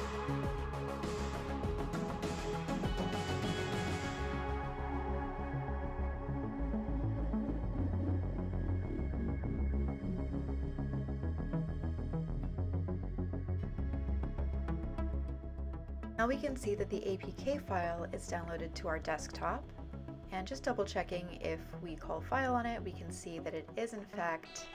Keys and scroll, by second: 0.0-2.8 typing, 8.2-18.3 typing, 18.4 Return, 21.6-24.7 typing.